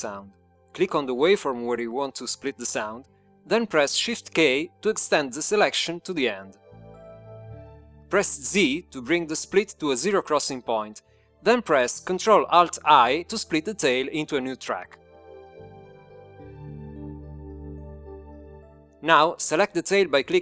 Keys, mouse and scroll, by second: 3.5-5.2 drag, 8.0 shift+k, 10.6 z, 15.7 ctrl+alt+i.